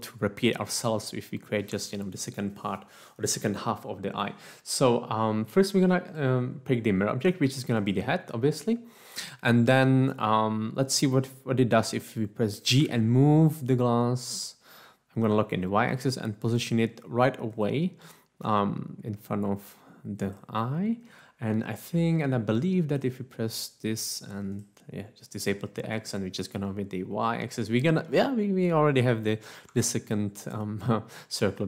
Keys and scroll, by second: 12.8 g, 15.5 y, 18.6 g, 29.7 Tab.